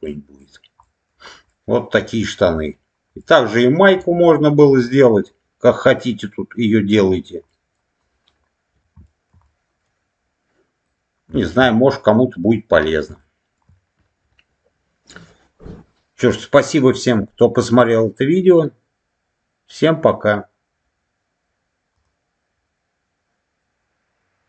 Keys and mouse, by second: 0.0 middle click, 0.7 middle click, 1.4-2.6 middle drag, 3.1 middle click, 3.9 middle click, 7.4 middle click, 9.0 shift+middle click, 9.4-10.8 middle drag, 11.2 shift+middle click, 11.9-12.9 middle drag, 13.1 shift+middle click.